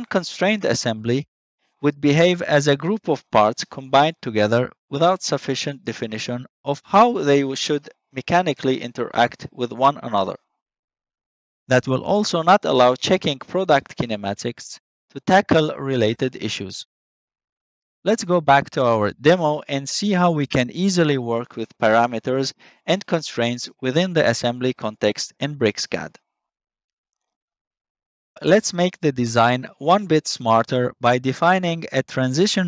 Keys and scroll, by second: 27.7 ctrl+s.